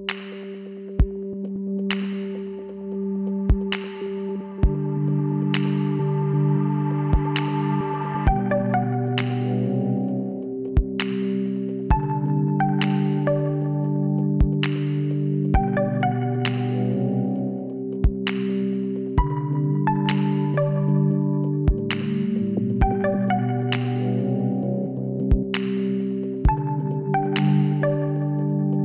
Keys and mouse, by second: 5.9 click, 6.4-7.9 middle drag, 7.9-10.6 drag, 10.1 ctrl+z, 10.8 click, 11.4-12.6 middle drag, 12.2 w, 16.0 click, 16.5-17.9 middle drag, 18.5 click, 19.0-20.1 middle drag, 21.8 shift+a, 27.2-28.8 drag.